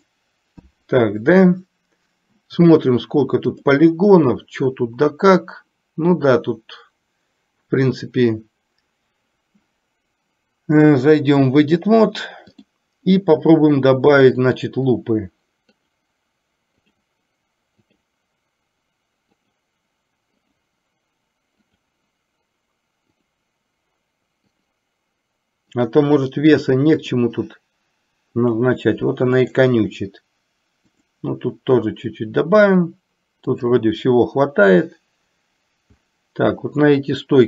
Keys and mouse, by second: 11.2-12.9 drag, 14.4 click, 15.9 click, 17.1 click, 18.1 click, 19.5 click, 20.5 click, 21.8 click, 23.3 click, 24.7 click, 25.9 click, 27.2 click, 28.5 click, 29.5 click, 31.2 click, 33.8 click.